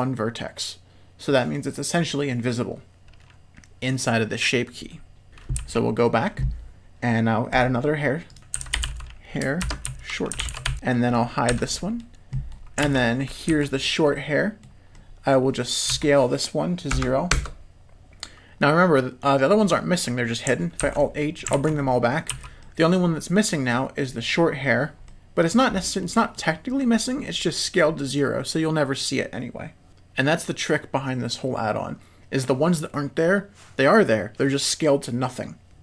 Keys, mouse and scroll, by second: 5.3 Tab, 5.5 z, 7.5 click, 8.3-10.7 drag, 10.7 Tab, 11.5 h, 11.7 middle click, 12.3 middle click, 12.8 alt+a, 13.5 l, 13.8 click, 14.6 middle click, 14.9 middle click, 15.9 s, 18.9 middle click, 20.8 alt+h, 21.1 middle click, 21.5 alt+a, 21.8 middle click, 22.3 z, 22.6 middle click, 25.0 middle click, 26.0 middle click, 27.8 middle click.